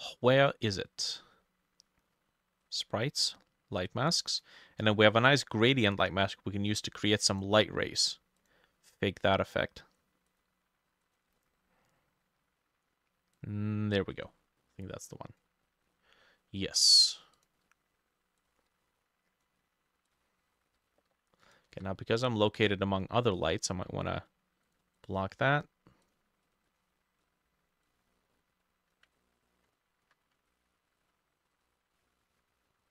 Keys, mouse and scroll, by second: 3.3-4.8 scroll down 1, 8.9-10.9 scroll down 1, 11.4-13.4 scroll down 5, 21.8 w, 25.0 double click, 29.2 ctrl+click, 30.1 q, 30.5 ctrl+click.